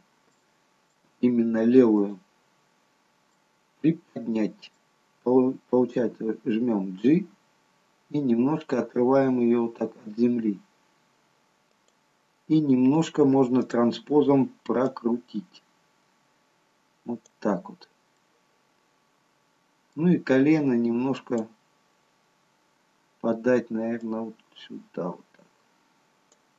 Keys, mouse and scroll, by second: 0.4-1.1 scroll up 3, 1.1 shift+middle click, 2.1 click, 3.5 middle click, 6.6 g, 13.7 click, 15.2 click, 18.3 middle click, 21.3 click, 24.1 click.